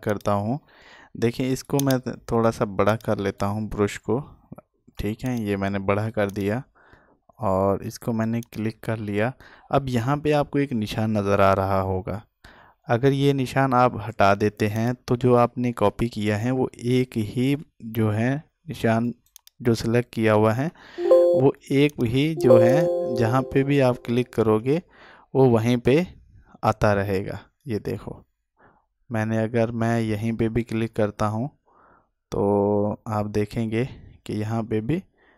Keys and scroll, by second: 21.1 alt+space.